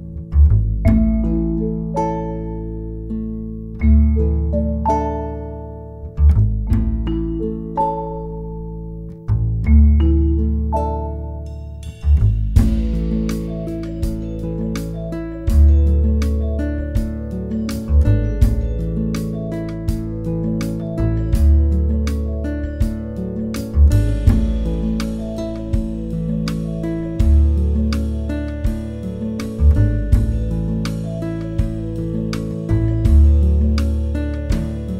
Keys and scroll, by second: 1.2 space, 2.7 space, 3.6 space, 5.0 b, 10.8 space, 13.6 space, 14.1 space, 14.7 r, 15.8 r, 19.4 space, 19.8 e, 20.0 space, 21.9 space, 22.2 space, 26.2 space, 26.6 space, 26.8 space, 28.0 space, 29.2 space, 32.4-34.2 typing.